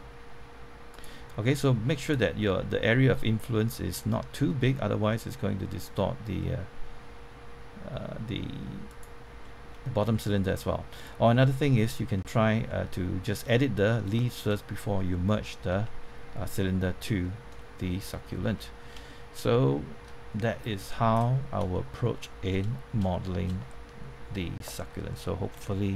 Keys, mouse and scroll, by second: 0.9 right click, 2.0 click, 2.5 click, 3.5 scroll down 1, 4.2-4.6 scroll up 1, 8.8 right click, 9.4-11.4 middle drag, 11.4 scroll down 1, 11.6 middle click, 15.7 Tab, 16.5 middle click, 17.5 shift+middle click, 18.7 scroll up 1, 19.0 shift+middle click, 20.6 click, 21.3 scroll up 1, 21.7 shift+middle click, 22.5-22.9 shift+scroll up 1, 23.1 shift+middle click.